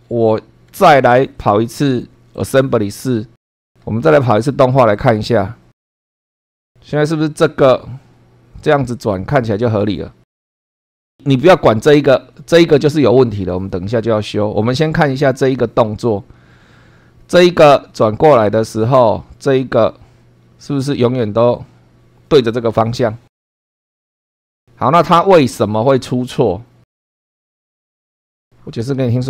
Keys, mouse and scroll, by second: 0.0 shift+scroll down 1, 0.9 shift+middle click, 2.3 click, 3.4 click, 4.9 click, 27.3 click, 27.8 scroll up 1.